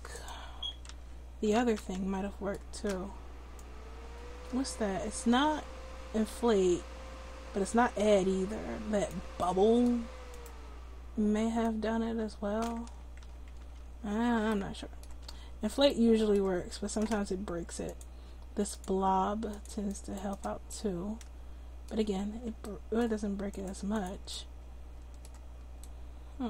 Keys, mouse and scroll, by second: 0.9 ctrl+z, 3.6-5.3 drag, 9.7-12.6 middle drag, 10.3-12.6 drag, 11.6-12.8 right drag, 12.8 ctrl+z, 13.2 ctrl+z, 13.6 ctrl+z, 15.2 ctrl+z, 16.5 Tab, 20.8-22.2 drag, 22.2 ctrl+z, 25.3 click.